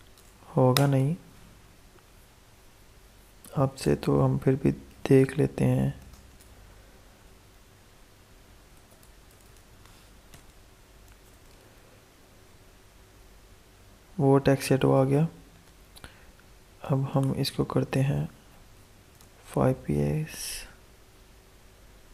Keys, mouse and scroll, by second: 0.0-0.7 typing, 4.5-6.3 typing, 8.5-10.1 typing, 11.0 ctrl+s, 11.5 alt+Tab, 13.0 F5, 14.9 alt+Tab, 16.8 click, 18.3-19.6 typing, 19.9 ctrl+s, 20.4 alt+Tab, 21.7 F5.